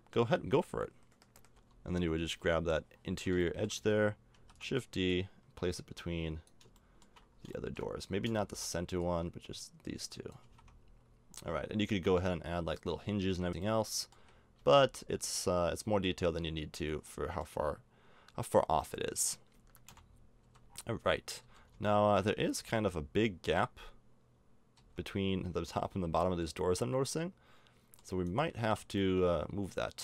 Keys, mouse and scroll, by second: 0.3 Tab, 1.5 l, 2.3 l, 2.9 middle click, 4.3 shift+d, 8.4-10.2 middle drag, 8.9-10.8 drag, 10.3 a, 10.5 Tab, 10.9 middle click, 11.3 middle click, 13.2 a, 13.7 middle click, 14.2 a, 14.6 a, 19.9 KP_0, 20.4 z, 20.7 scroll up 1, 20.7 middle click, 21.4 z, 22.6 z, 24.8 z, 26.4 middle click, 28.6 Tab, 29.3 middle click, 29.4 middle click.